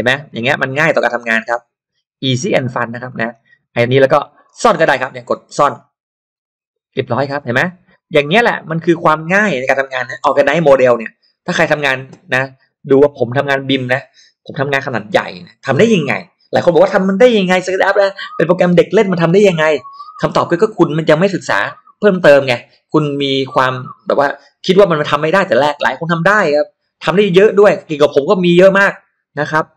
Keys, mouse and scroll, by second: 0.1-0.5 scroll down 2, 0.6-0.9 scroll up 2, 1.5-1.9 scroll down 1, 2.7 scroll down 1, 3.1 middle click, 3.6-3.9 scroll up 1, 6.3 click, 7.1-7.4 scroll down 2, 7.4-7.7 scroll up 2, 7.9 middle click, 8.3 scroll down 2, 8.8 click, 9.5 middle click, 10.3 click, 10.3 m, 10.6 m, 11.4 click, 11.6 space, 11.7 click, 12.3 scroll up 1.